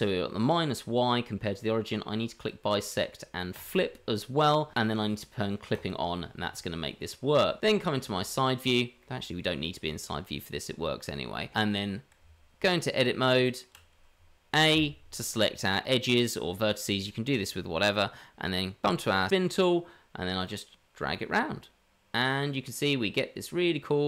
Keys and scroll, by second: 12.2 Tab, 14.7 a.